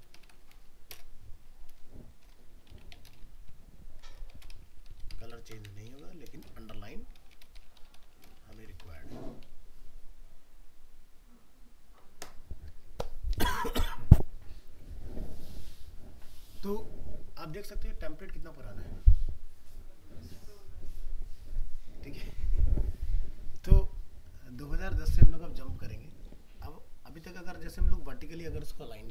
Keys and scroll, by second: 8.6 ctrl+s, 8.9 alt+Tab.